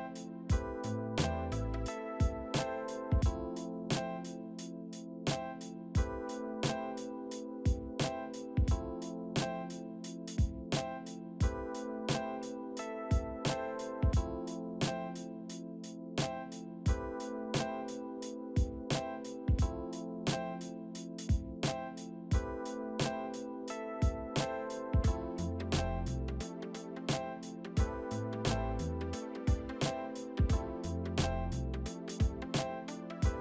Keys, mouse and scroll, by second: 3.7 ctrl+d, 5.7 p, 8.4 z, 10.4 alt+middle click, 11.6 middle click, 12.3 ctrl+alt+middle click, 14.3 alt+middle click, 15.2 middle click, 16.6 alt+middle click, 17.0 F3, 17.0 F3, 18.3 scroll down 3, 18.5 alt+middle click, 18.9 z, 19.5 w, 19.5 middle click, 20.4 shift+click, 23.4 alt+b, 25.9 double click, 27.4 c, 29.6 middle click, 29.6 middle click, 30.1 e, 31.5 a, 33.3 alt+shift+middle click.